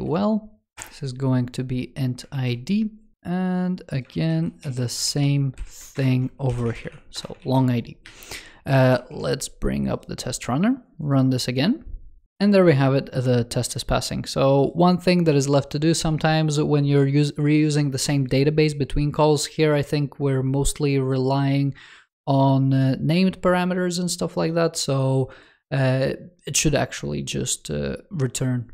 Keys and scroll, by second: 2.2 super+s, 3.1 super+c, 3.9 ctrl+s, 5.1 super+v, 5.8 alt+BackSpace, 7.2 super+s, 7.9 super+2, 8.6 super+t.